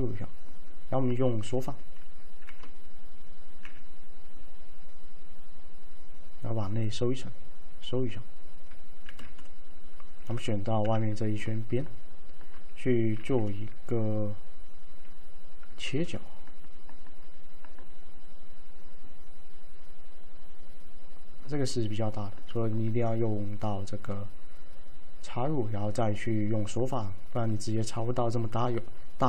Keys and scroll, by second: 2.5-4.2 typing, 9.2 f, 10.9 2, 13.3 f, 16.0 alt+f.